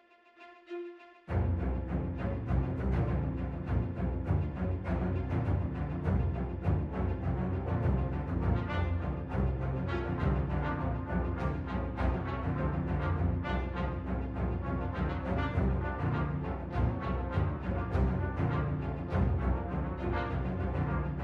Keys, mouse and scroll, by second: 2.6-2.9 scroll down 1, 3.3 middle click, 6.3 Tab, 6.6 click, 7.3 shift+click, 8.3 click, 9.0 click, 9.9 Tab, 10.4 middle click, 12.4-13.0 scroll up 1, 13.0 Tab, 13.4 click, 14.7 click, 15.5 click, 16.1 Tab, 16.7 middle click, 18.2 Tab, 18.5 click, 19.7 click, 20.5 click, 21.0 Tab.